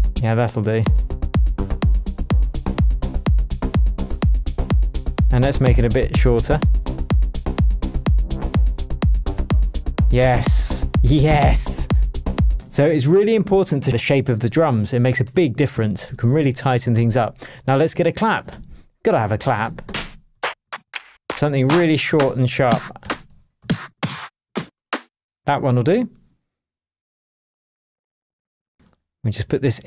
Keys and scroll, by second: 0.1 space, 3.4 0, 4.1 Return, 12.5 space, 13.1 super+s, 15.7 Left, 16.0 Up, 16.9 Left, 18.5 Right, 19.8 Down, 23.0 Up, 23.6 Down.